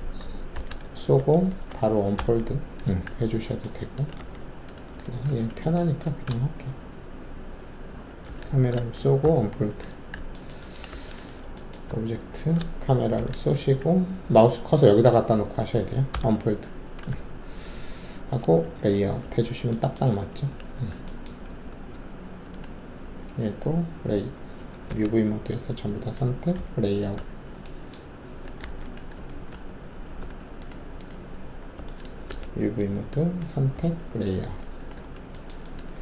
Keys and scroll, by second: 0.5 ctrl+alt+shift+c, 2.1 alt+d, 4.1 alt+w, 5.3 alt+`, 8.2 ctrl+shift+c, 9.2 d, 10.9 alt+w, 11.8 alt+`, 13.1 ctrl+shift+c, 16.1 d, 18.6 alt+z, 20.1 alt+`, 20.7 w, 21.4 alt+`, 23.7 z, 24.8 alt+4, 26.5 z, 28.6 alt+w, 29.4 alt+`, 30.6 alt+`, 32.2 alt+4, 33.7 z, 34.9 alt+`.